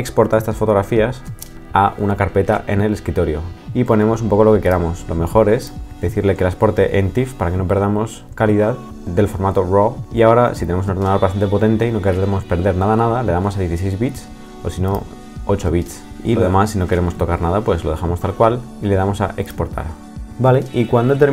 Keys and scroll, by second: 1.2 shift+super+e.